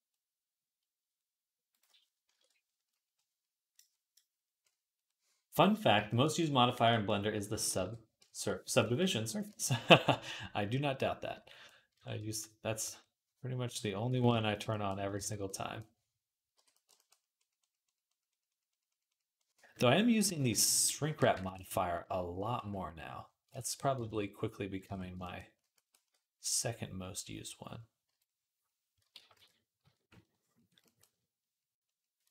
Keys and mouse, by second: 0.1 middle click, 0.2 middle click, 0.9-7.7 drag, 7.6 alt+q, 9.7 d, 14.8-16.7 alt+drag, 15.3 alt+q, 16.4 j, 20.9 click, 22.4 x, 23.9 ctrl+Tab, 24.6-32.3 ctrl+drag, 24.7 ctrl+Tab, 25.8 d, 27.9 i, 29.0 ctrl+z, 29.2 ctrl+z, 29.7 d.